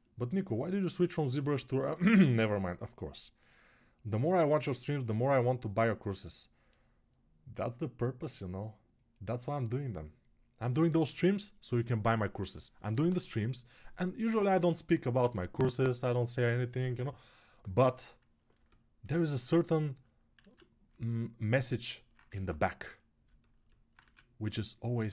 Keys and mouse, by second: 19.8-25.1 alt+drag, 21.0 alt+q, 22.1 ctrl+Tab, 23.8 1.